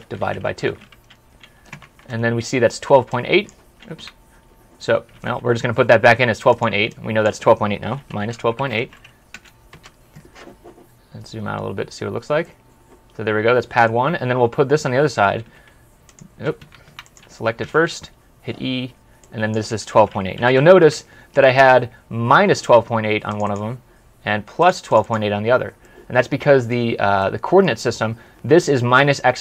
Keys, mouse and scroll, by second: 0.0-1.0 typing, 2.1-2.9 typing, 3.9 Escape, 5.0 typing, 6.7-9.3 typing, 6.8 double click, 9.6 Return, 10.7 scroll up 1, 11.1 scroll down 1, 11.3 scroll up 1, 11.6 scroll down 1, 12.3 middle click, 15.3 middle click, 16.0 typing, 16.5 Escape, 17.5 typing, 19.6-20.9 typing, 21.7 scroll up 1, 22.1-22.5 scroll down 1, 23.3 double click, 25.7 middle click.